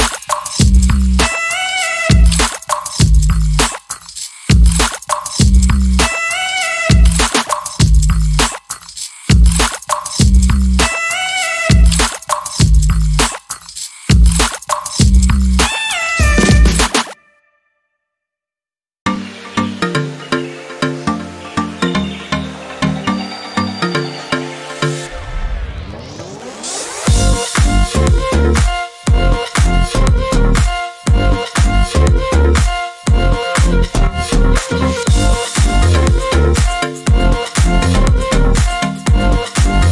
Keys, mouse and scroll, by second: 0.3 click, 1.6 click, 3.4 click, 4.0 shift+click, 5.5 click, 6.5 click, 7.4 KP_2, 7.6 KP_0, 7.7 KP_Enter, 10.7 click, 12.4 ctrl+d, 13.4-15.6 ctrl+drag, 16.9 click, 17.7 click, 19.7-22.2 ctrl+drag, 22.9 click, 24.8 click, 27.4 click, 29.5 click, 31.0 ctrl+a, 33.1 click, 34.3 click, 37.7-38.7 shift+drag.